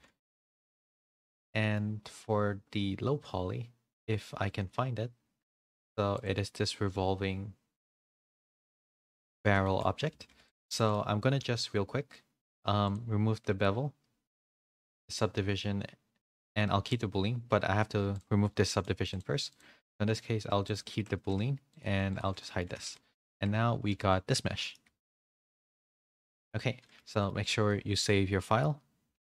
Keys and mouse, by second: 0.2 shift+middle drag, 0.6 middle click, 0.9 a, 1.0 a, 1.3 shift+middle click, 1.6 middle click, 9.2 a, 9.4 a, 9.6 shift+middle drag, 10.1 a, 10.2 a, 10.7 shift+middle click, 12.8-14.3 drag, 14.9 click, 18.6 middle click, 19.0 click, 20.6 click, 20.9 ctrl+a, 21.7 click, 21.9-26.7 typing, 22.4 middle drag, 23.3 Tab, 24.1 middle click, 25.2 Tab, 25.8 drag, 26.3 shift+middle drag, 26.8-27.2 shift+middle drag, 27.6 middle click, 29.1 ctrl+s.